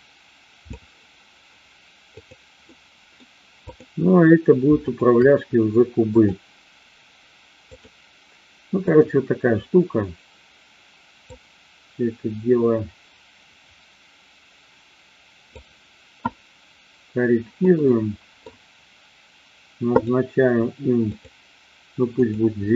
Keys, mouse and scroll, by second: 2.2 click, 2.6-3.2 middle drag, 3.7-4.3 drag, 4.8-5.5 shift+drag, 6.0-7.8 drag, 8.7 click, 11.2-15.7 drag, 17.6 middle click, 20.0 click, 21.1 click, 22.1 click, 22.6-22.7 middle drag.